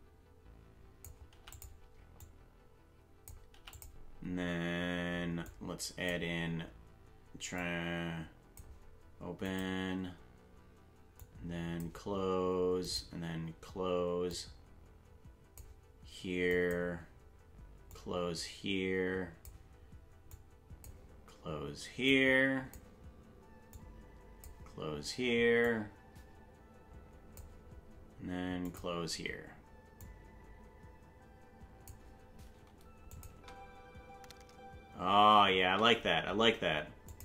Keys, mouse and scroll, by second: 2.2 click, 5.5 click, 7.6-8.6 drag, 9.5 click, 11.2 click, 12.9 click, 14.3-15.6 drag, 16.5 click, 17.9-19.5 drag, 20.3 click, 22.1 click, 23.7 click, 25.6-27.4 drag, 28.7 click, 30.0-31.9 drag, 33.1-35.0 drag, 33.3 space, 35.7 space, 37.1 click.